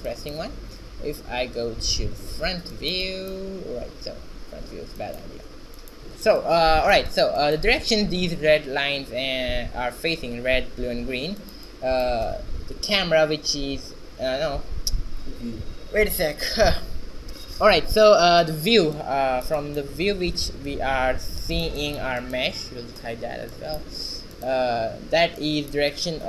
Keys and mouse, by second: 2.0 q, 18.6 q, 19.5 q, 21.6 h, 23.2 z, 24.8 ctrl+b.